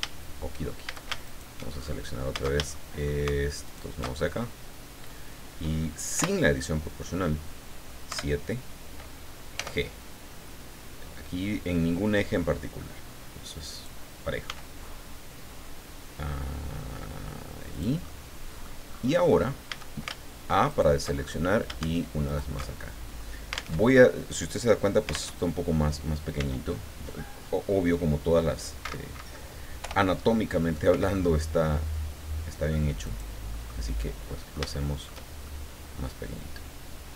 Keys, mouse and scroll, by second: 0.8 shift+a, 1.2 alt+shift+right click, 1.7-2.0 scroll up 2, 2.7 alt+shift+click, 3.6 alt+shift+right click, 4.1-4.7 scroll down 2, 6.1 o, 8.1 KP_7, 9.5 g, 13.6 click, 14.4 s, 17.7 click, 18.1 middle click, 18.2 scroll up 2, 18.9-19.3 scroll up 1, 19.7 a, 20.7 alt+shift+right click, 21.1-21.5 alt+shift+scroll up 2, 22.2 alt+shift+right click, 22.7-23.4 alt+shift+scroll down 4, 23.8 alt+Tab, 25.3 alt+Tab, 26.4 s, 28.8 Escape, 29.8 o, 30.9 s, 33.0 click, 33.5 middle click, 34.0-35.2 middle drag, 35.4-37.1 shift+middle drag.